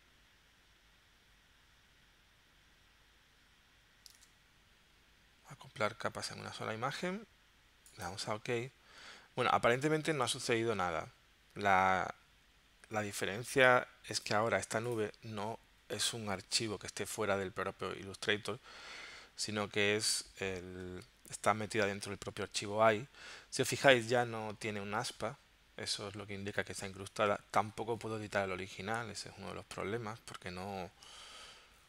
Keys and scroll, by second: 4.2 super+Tab.